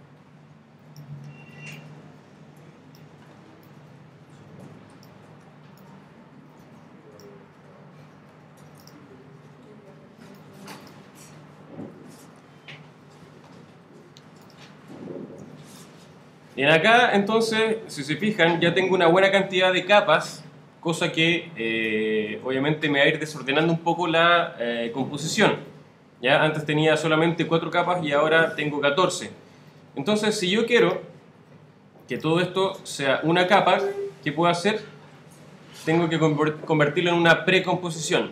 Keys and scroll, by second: 1.2 super+d, 3.2 super+d, 5.3 super+d.